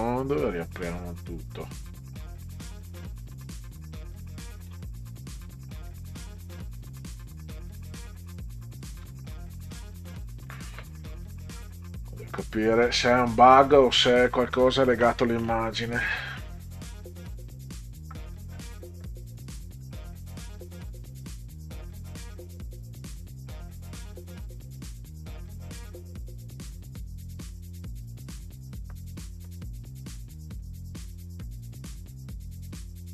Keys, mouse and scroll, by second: 1.7 click, 4.5 click, 5.4 s, 5.8 c, 9.0 r, 9.8 click, 16.8 click, 17.6 click, 17.8 click, 30.3 click, 32.1 click.